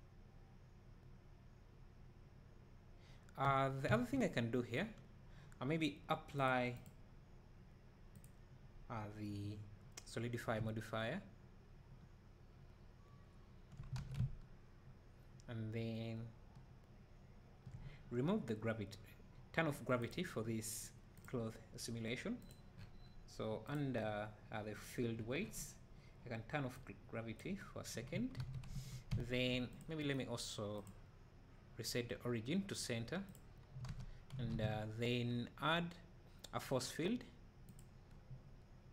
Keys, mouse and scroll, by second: 8.3-10.6 drag, 11.7 `, 12.7 `, 14.0 alt+a, 14.2 `, 20.1 click, 26.9-29.8 drag, 28.4 alt+a, 33.9 alt+a, 33.9-37.8 right drag.